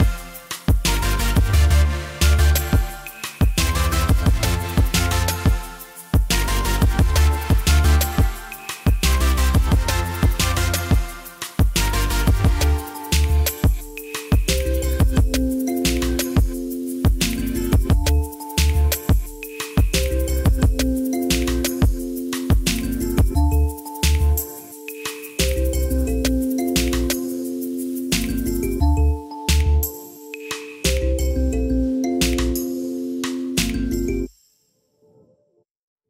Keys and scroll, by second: 11.3 3, 11.8 Return, 18.2 1, 18.4 Return, 21.7 ctrl+s.